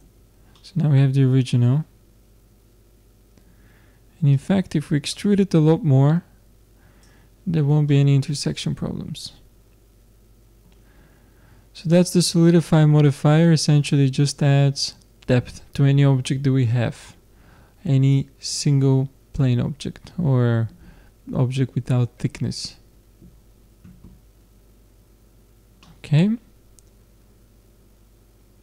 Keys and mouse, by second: 0.0 Tab, 2.1 middle click, 2.7 middle click, 4.4-6.3 drag, 10.8-12.3 middle drag, 12.3-19.4 drag, 25.8 middle click.